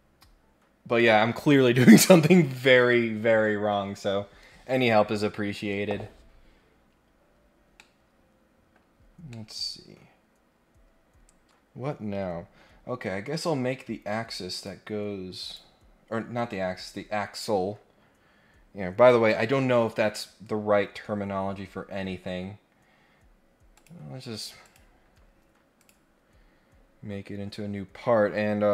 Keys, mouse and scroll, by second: 6.8 scroll down 2, 7.2-7.7 scroll up 2, 7.7-8.7 middle drag, 9.3-12.6 middle drag, 14.5 click, 15.4 click, 16.1 scroll down 1, 16.2-17.1 scroll up 4, 23.7 click, 24.6 click, 25.8 click.